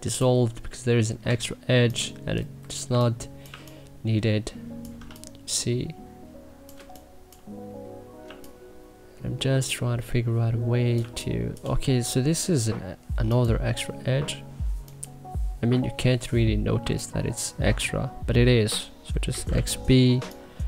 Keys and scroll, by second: 1.1 w, 2.4 Delete, 2.7 2, 3.2 1, 4.8 3, 6.5 1, 10.8 2, 16.0 Delete, 16.6 1, 18.9-19.8 typing.